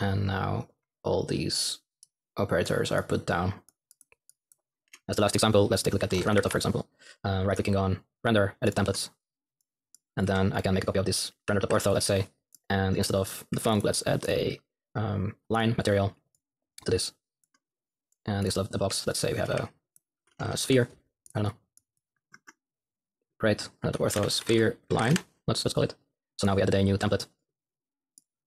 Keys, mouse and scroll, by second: 5.8-6.8 typing, 8.7 typing, 10.3 x, 11.6 ctrl+v, 13.6 ctrl+x, 17.3-19.5 drag, 18.8-20.3 typing, 22.8-23.5 typing, 28.3-28.4 typing.